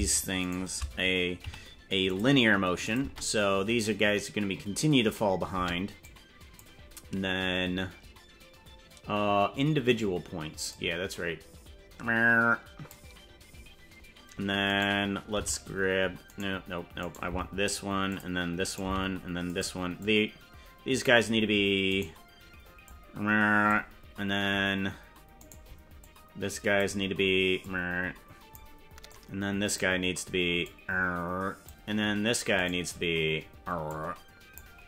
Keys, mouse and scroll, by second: 0.5 shift+right click, 1.5 t, 2.8 click, 3.0 space, 5.6 space, 6.0 click, 10.7-12.9 drag, 14.7 right click, 15.3 g, 17.1 right click, 17.3 g, 18.7 right click, 18.9 g, 20.0-21.1 drag, 22.0 right click, 22.8 click, 25.6 right click, 26.0 click, 27.6-28.6 drag, 29.1 click, 30.6-31.7 drag, 32.8 right click, 33.9 click, 34.4 click.